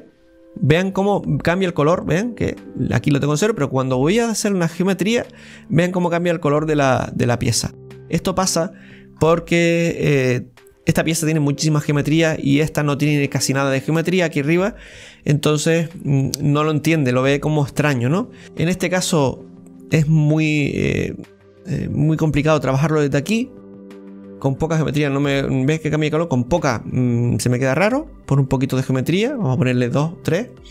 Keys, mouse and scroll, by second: 7.3-7.9 scroll down 5, 7.8-9.2 middle drag, 9.2-12.2 scroll up 1, 12.2-12.8 scroll up 2, 13.3-13.7 scroll down 3, 13.7-16.8 middle drag, 17.7-18.4 scroll up 5, 29.8 click, 30.5-30.7 middle drag.